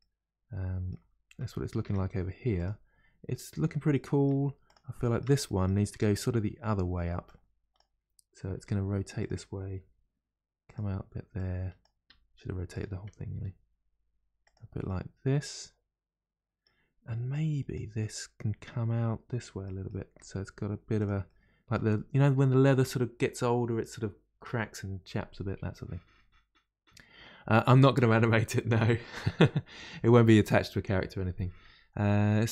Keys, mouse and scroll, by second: 0.0-1.8 middle drag, 1.8 Tab, 2.5 click, 3.3-4.6 middle drag, 4.6 click, 5.0-5.9 shift+middle drag, 5.9 Tab, 7.2 click, 8.5 r, 11.3 click, 12.1 g, 14.8-17.3 middle drag, 17.3 click, 18.0-20.1 middle drag, 20.1 g, 21.3-24.3 middle drag.